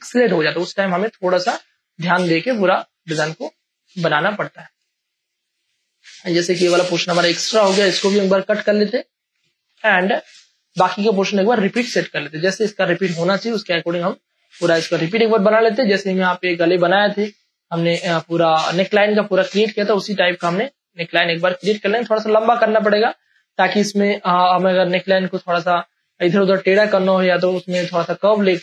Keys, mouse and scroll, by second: 0.2 Right, 1.5 Delete, 2.2 ctrl+d, 2.5 ctrl+space, 2.7 ctrl+click, 3.0 click, 3.4 space, 3.9 ctrl+click, 4.9 space, 5.2 click, 5.4 space, 5.8 ctrl+click, 6.7 click, 7.8 Up, 8.8 Delete, 9.6 ctrl+d, 9.8 ctrl+space, 10.0 ctrl+click, 10.7 v, 10.7 space, 11.2-12.7 alt+drag, 12.6 ctrl+t, 12.8 ctrl+right click, 13.7 click, 13.9 Return, 14.8 ctrl+e, 15.1 ctrl+space, 15.4 ctrl+click, 15.6 ctrl+space, 15.8 ctrl+click, 16.2 v, 17.0 click, 17.0-18.9 alt+drag, 19.0 click, 19.0 space, 20.0 ctrl+e, 21.0-23.3 alt+drag, 23.3 ctrl+e, 24.2-26.5 alt+drag, 26.4 ctrl+e, 26.8 ctrl+space, 27.0 ctrl+click, 27.3 ctrl+space, 28.0 ctrl+click, 28.2 ctrl+space.